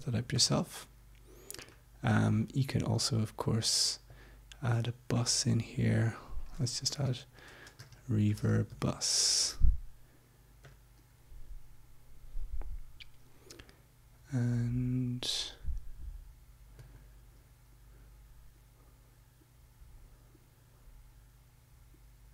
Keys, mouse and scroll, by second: 0.3 click, 2.2 right click, 4.1-5.3 drag, 6.0 click, 6.6-9.2 typing, 10.6 click, 14.4 click, 16.7 right click.